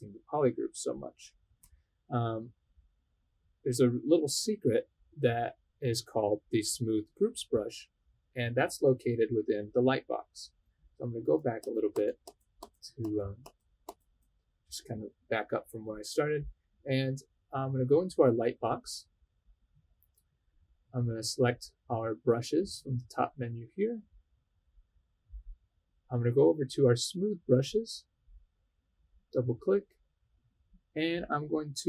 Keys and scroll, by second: 11.2 super+z, 11.6 super+z, 11.9 super+z, 12.2 super+z, 12.5 super+z, 13.0 super+z, 13.4 super+z, 13.8 super+z.